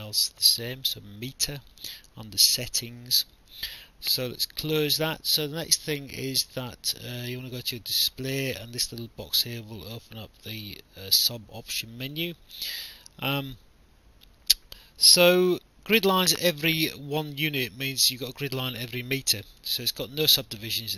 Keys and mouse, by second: 0.9 click, 4.6 click, 7.0 click, 12.1 click, 13.4 click.